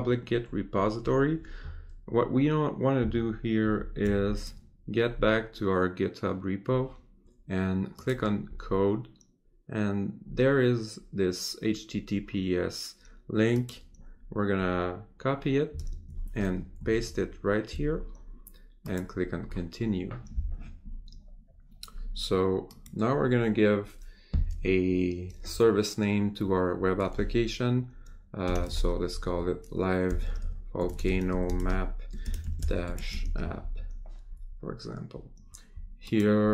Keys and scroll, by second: 3.6 ctrl+shift+Tab, 15.7 ctrl+Tab, 16.9 ctrl+v.